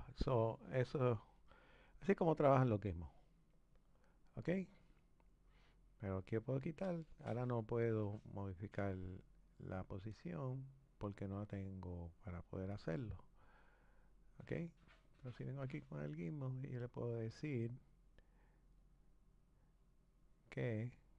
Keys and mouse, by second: 3.0 click, 6.0 click, 7.4 click, 10.5 click, 11.3 click, 13.6 click, 15.4-17.8 drag, 18.8 click, 19.7-21.1 drag.